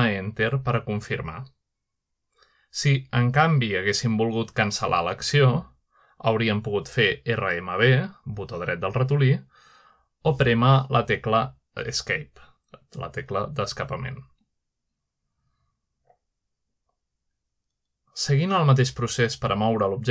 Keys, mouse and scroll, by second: 1.5 g, 3.1 Return, 5.7 g, 8.3-9.4 right drag, 10.2 g, 10.9 right click, 11.9 g, 13.4 Escape.